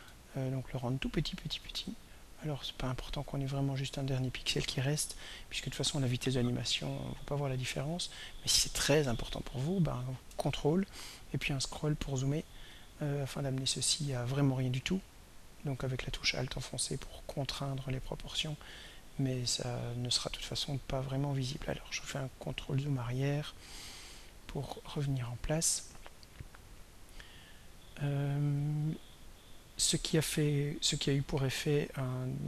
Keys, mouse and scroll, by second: 11.1-11.5 ctrl+scroll up 1, 11.9-12.4 ctrl+scroll up 2, 15.0-17.9 drag, 18.9 click, 20.6-20.9 ctrl+scroll down 2, 21.1-21.6 ctrl+scroll down 2, 23.0 ctrl+scroll down 2, 24.0 ctrl+scroll up 2, 26.4-28.1 drag, 31.6 click.